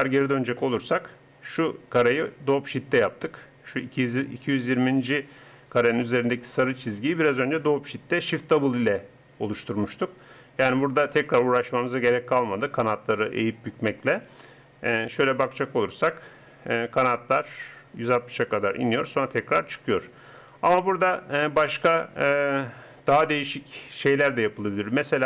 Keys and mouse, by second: 15.9 click, 17.2-19.0 drag.